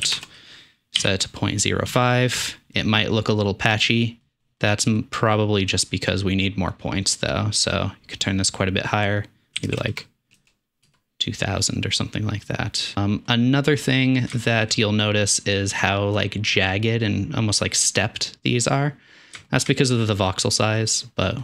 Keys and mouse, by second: 9.9 KP_0, 13.6-14.2 middle drag, 14.5-14.8 shift+middle drag, 16.1-16.5 middle drag, 18.8 middle click, 19.1 middle click.